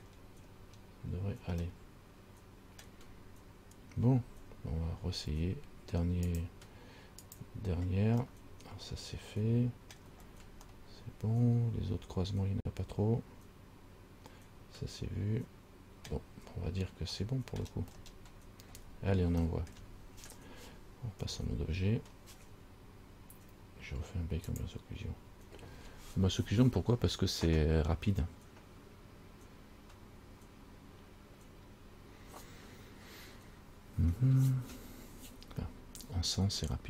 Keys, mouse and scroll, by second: 0.7-1.8 scroll down 2, 1.9 middle click, 6.5 click, 7.5 click, 8.5 middle click, 10.3-10.8 scroll down 4, 10.9 middle click, 17.3 middle click, 18.1-18.9 scroll up 3, 18.9 scroll down 3, 19.6 middle click, 21.4 Tab, 24.7 click.